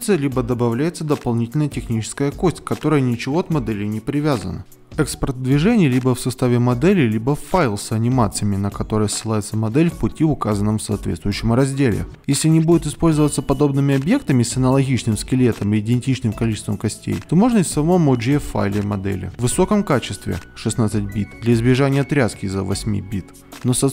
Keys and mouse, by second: 0.0 KP_Decimal, 0.4 ctrl+Tab, 0.5 click, 0.5 middle click, 0.9 click, 1.0 ctrl+Tab, 1.0 middle click, 2.1-5.5 typing, 2.1 click, 3.6 Escape, 4.9 click, 4.9 alt+KP_1, 6.3 alt+F7, 12.1 click, 12.7 click, 15.2 alt+F8.